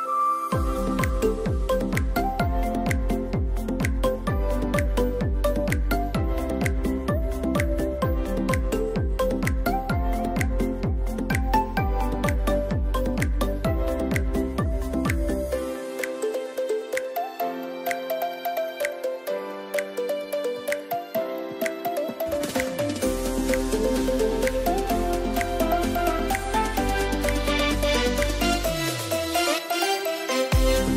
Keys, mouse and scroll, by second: 0.0 scroll up 1, 0.4 ctrl+z, 1.3-2.6 drag, 2.6 ctrl+0, 6.6 ctrl+0, 6.6 ctrl+shift+click, 7.6 ctrl+g, 11.8 z, 12.0 ctrl+shift+e, 13.4 scroll down 1, 13.9 scroll up 1, 15.4 ctrl+0, 16.3 ctrl+shift+a, 21.9 click, 22.7 j, 23.2-24.6 drag, 24.9 x, 25.7-30.9 drag.